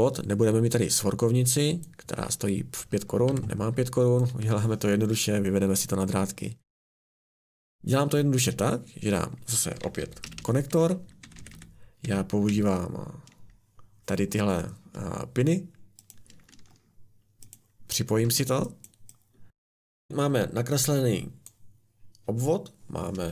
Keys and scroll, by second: 3.3 Delete, 4.3 Delete, 6.9 a, 9.6-12.5 typing, 18.2 Escape.